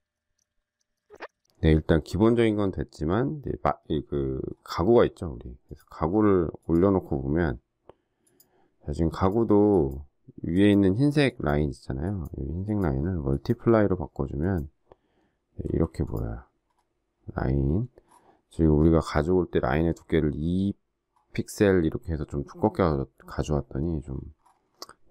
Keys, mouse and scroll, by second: 0.0 shift+click, 0.2 shift+click, 0.5 shift+click, 1.0 shift+click, 15.6 z, 16.0 alt+click, 16.6 alt+scroll down 1, 18.0 alt+scroll up 1, 21.2 alt+scroll down 1, 24.3 alt+scroll up 1.